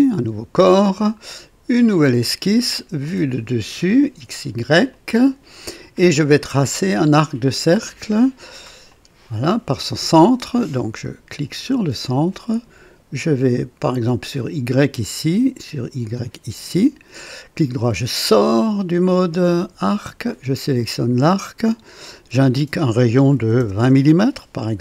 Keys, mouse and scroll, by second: 1.8 click, 3.9 click, 4.9 click, 8.9 click, 11.6 click, 13.9 click, 16.0 click, 16.7 right click, 18.1 right click, 20.0 click, 21.7 click, 23.4 KP_2, 23.6 KP_0, 23.9 Return.